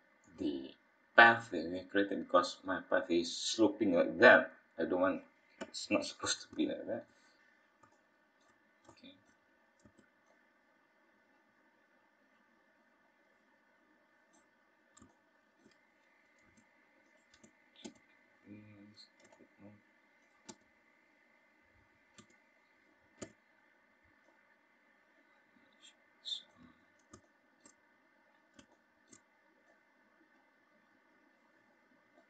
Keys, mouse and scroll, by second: 0.6-1.3 scroll up 2, 1.7 middle click, 2.6 scroll up 1, 2.8-3.6 scroll down 4, 3.6-4.0 scroll up 1, 4.0-4.5 scroll down 1, 4.5 scroll up 2, 5.6 KP_1, 6.2-6.6 scroll up 2, 6.6 shift+middle click, 9.8 Tab, 13.0 alt+a, 14.4 b, 16.4 click, 17.4 click, 21.1-22.1 scroll up 4, 22.1-22.6 scroll down 2, 22.6-23.2 scroll up 1, 23.2 scroll down 1, 23.3-23.9 scroll down 3, 23.9 shift+middle click, 24.4-25.1 scroll up 4, 25.1 shift+middle click.